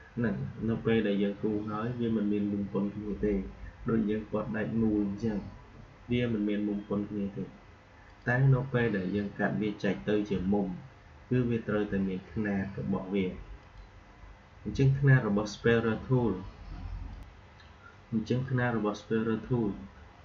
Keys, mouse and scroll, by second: 0.4 Delete, 8.0 click, 13.5 click, 17.0 click.